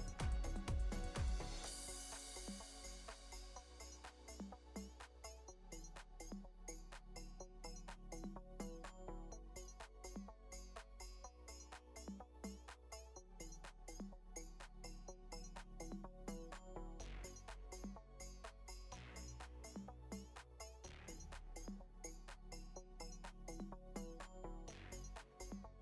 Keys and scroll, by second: 10.3 Up, 13.1 space, 16.1 Up, 20.4 ctrl+-, 21.0 ctrl+=, 21.3 ctrl+space, 21.5 ctrl+space, 25.5 space.